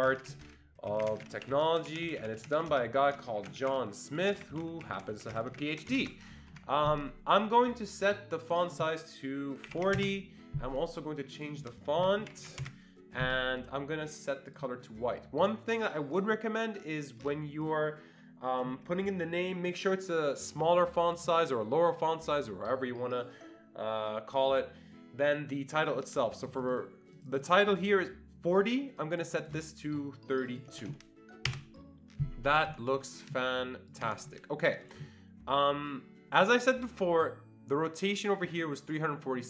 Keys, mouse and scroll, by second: 0.0-6.5 typing, 6.5 Escape, 8.5 click, 9.5-10.2 typing, 11.4 click, 11.9-12.8 typing, 14.5 click, 16.1 click, 16.2-23.6 drag, 26.4 click, 26.6 click, 27.3-29.0 drag, 29.0 click, 29.3 double click, 29.4 click, 30.5-31.3 typing, 30.5 click, 31.5 Return, 32.4 Escape, 32.6 Escape, 33.9 click, 34.0 Escape.